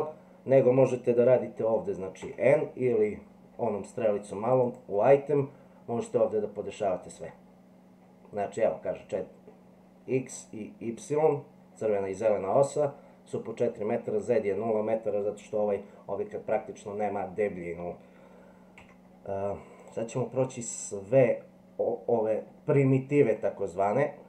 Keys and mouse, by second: 2.2 n, 18.8 x, 23.3-24.2 drag.